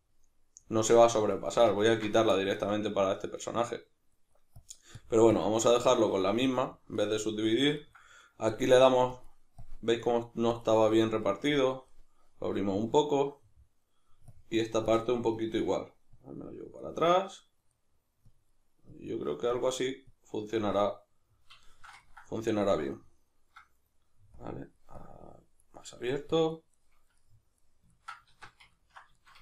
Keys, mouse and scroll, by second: 1.3-4.6 middle drag, 4.6-6.3 drag, 6.3-8.5 middle drag, 8.5-10.0 drag, 10.0 middle click, 10.5 click, 11.2-14.3 middle drag, 14.3-17.0 drag, 17.0-18.3 middle drag, 18.3-20.6 drag, 20.6-24.3 middle drag, 24.3-25.8 drag, 25.8 middle click, 26.3 click, 26.7-29.4 middle drag, 28.3 alt+q.